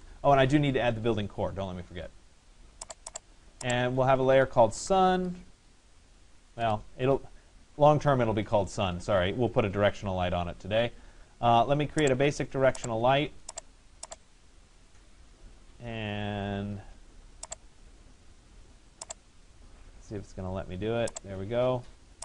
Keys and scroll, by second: 0.0 Return, 6.6 Return.